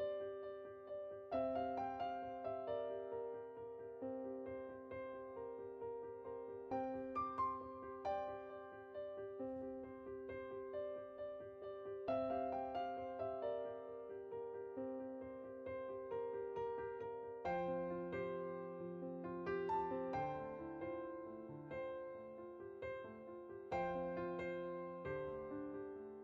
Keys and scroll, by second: 15.5-16.0 typing.